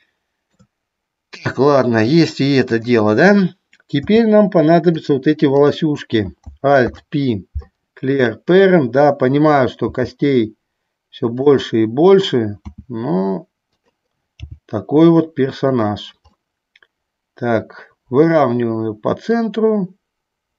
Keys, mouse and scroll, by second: 0.1 shift+middle click, 2.9 click, 5.7 click, 7.0 alt+p, 10.1 g, 11.6 click, 12.8 s, 13.8 click, 14.6 g, 15.8 click, 16.6-18.3 middle drag, 19.5-20.5 drag.